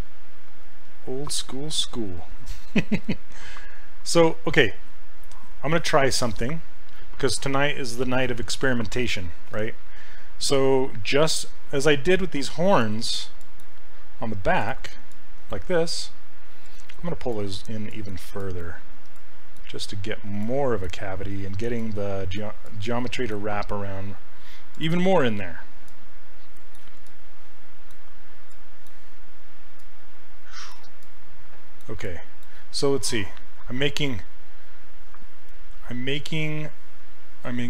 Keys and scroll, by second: 3.0 s, 17.3 s, 18.4 s, 19.1 s, 20.4 s, 21.8 s.